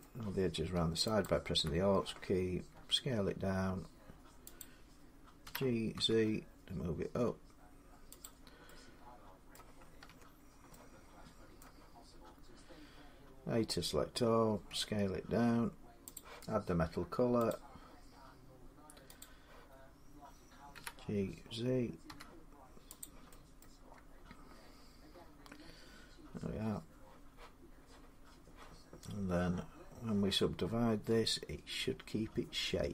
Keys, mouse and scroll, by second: 1.0 alt+click, 1.0 alt+click, 2.5 s, 4.4 click, 5.2-5.7 typing, 8.0 click, 9.3 middle click, 9.9 Tab, 10.2-10.5 scroll down 3, 10.2 z, 11.4 middle click, 14.5 scroll, 14.5 s, 15.9 click, 17.3 click, 19.0 click, 20.5 g, 21.9 z, 22.8 click, 23.4 middle click, 23.9 scroll up 5, 25.5 middle click, 30.9 Tab.